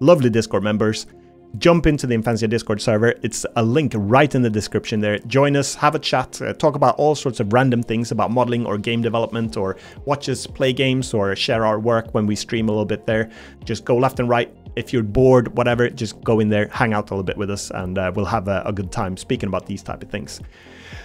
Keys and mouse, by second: 0.8 middle click, 3.1 middle click, 3.4 Tab, 4.4 middle click, 5.6 middle click.